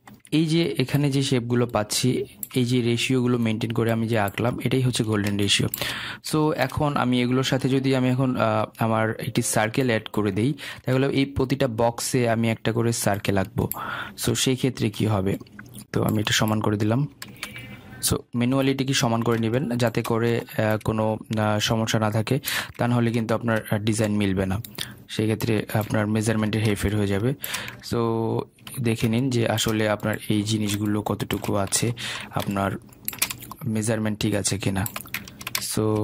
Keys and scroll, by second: 15.0 ctrl+z.